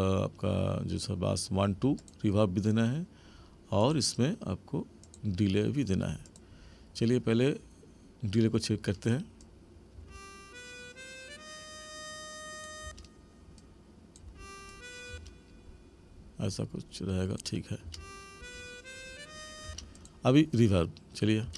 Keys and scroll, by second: 10.0 space, 12.8 space, 14.2 space, 17.8 space, 19.7 space, 21.4 space.